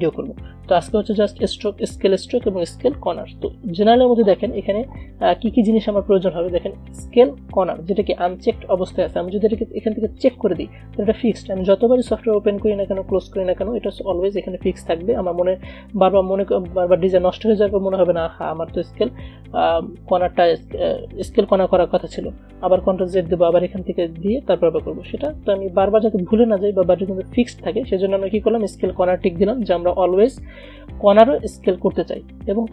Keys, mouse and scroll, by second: 10.3 click.